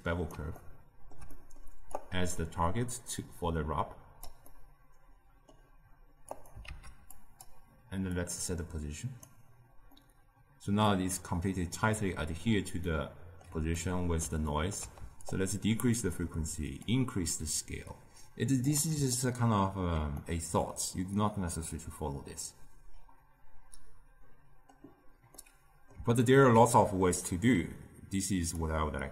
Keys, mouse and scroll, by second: 0.5-1.9 ctrl+middle drag, 1.9 click, 3.3 click, 4.5-6.2 middle drag, 6.2 click, 6.6 shift+d, 8.1-9.9 drag, 9.9-12.7 middle drag, 12.7 scroll down 1, 12.8-15.2 middle drag, 15.2-19.1 shift+drag, 19.1-23.1 ctrl+middle drag, 25.3-28.5 middle drag, 28.5 click.